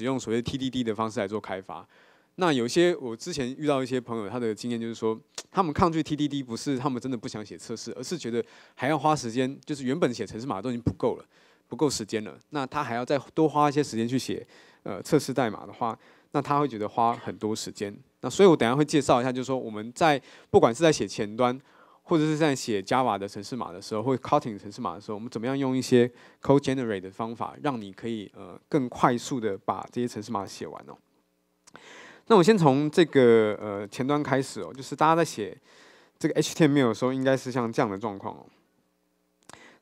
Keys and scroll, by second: 37.6 super+1.